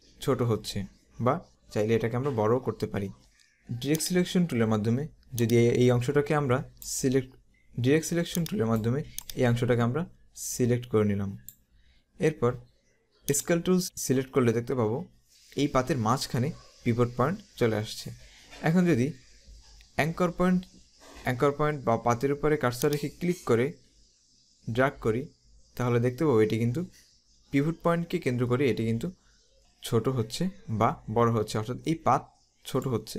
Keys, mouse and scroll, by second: 4.1 click, 5.5 click, 8.4 click, 13.4 click, 22.9 click.